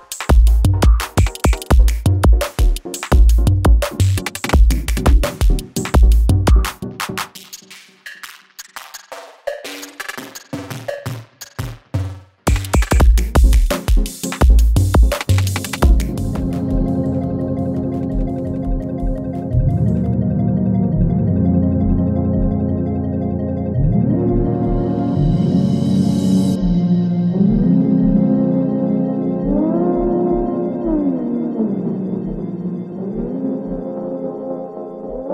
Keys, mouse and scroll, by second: 0.2 space, 3.1 space, 3.8 click, 5.4 space, 9.4 space, 10.0 n, 10.2 space.